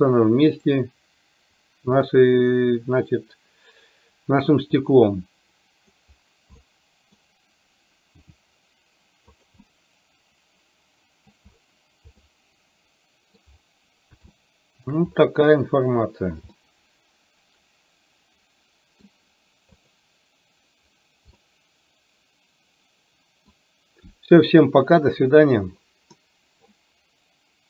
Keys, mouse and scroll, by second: 0.9 click, 2.3-6.1 middle drag, 6.8-7.3 middle drag, 7.3-8.4 scroll down 1, 8.4 r, 9.8-11.4 middle drag, 12.4-13.5 middle drag, 14.4-15.1 shift+middle drag, 16.8-19.1 middle drag, 19.9 click, 21.5-23.6 middle drag.